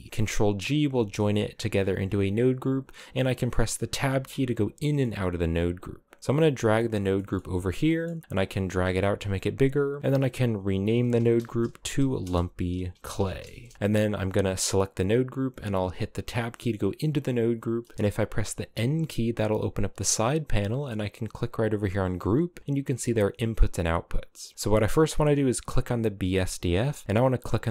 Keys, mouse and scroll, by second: 3.6 Tab, 4.2-5.7 scroll up 5, 5.7 click, 6.8 middle click, 7.0-7.5 scroll up 7, 7.5 middle click, 8.3 click, 9.4-12.2 drag, 14.0 click, 14.6 click, 16.0 Tab, 16.5-17.4 scroll down 6, 17.4-18.4 middle drag, 18.4 n, 21.2 click, 25.2 click, 27.5-27.7 drag.